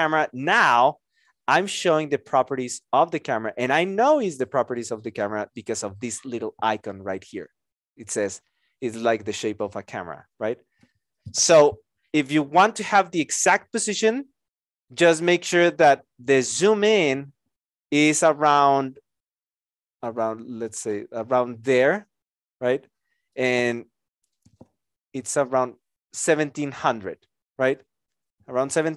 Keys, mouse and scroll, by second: 14.9 alt+click.